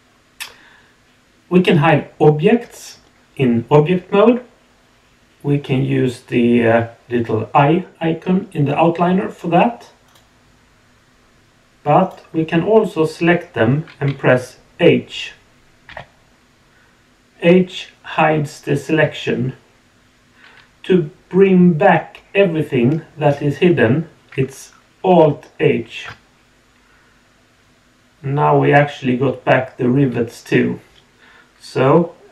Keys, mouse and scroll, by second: 9.3 click, 10.0 click, 12.0 click.